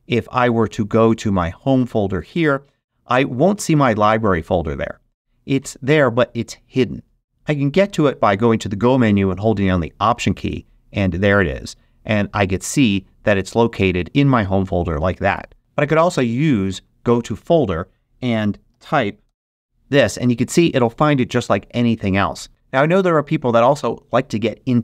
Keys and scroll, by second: 15.6 BackSpace, 18.4-19.7 typing.